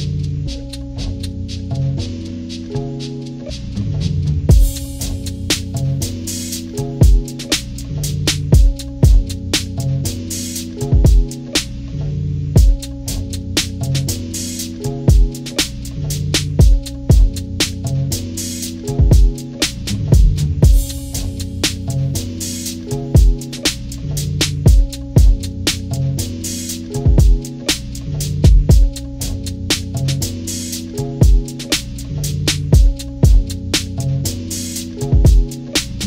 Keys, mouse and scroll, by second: 4.2 click, 6.3 click, 8.9 click, 10.2-15.3 drag, 16.7-19.4 drag, 20.5 click, 21.4 click, 22.2 ctrl+=, 24.0 click, 27.3 shift+click, 28.6 shift+click, 29.7 shift+click, 31.1 shift+click, 32.9 shift+click, 34.9 click.